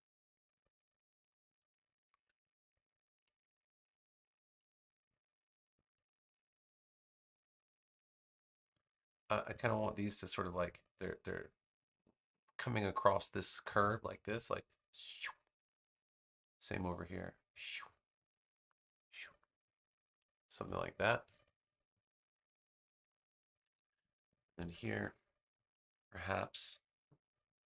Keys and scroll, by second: 21.2 space.